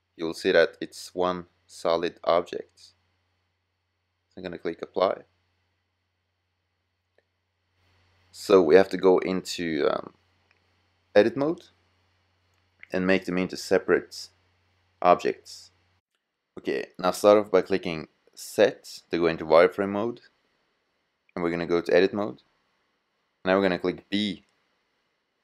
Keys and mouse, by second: 6.3-11.3 drag, 11.3-13.0 middle drag, 18.3 z, 20.5-20.8 drag, 21.8 click, 23.6 a, 25.2 b.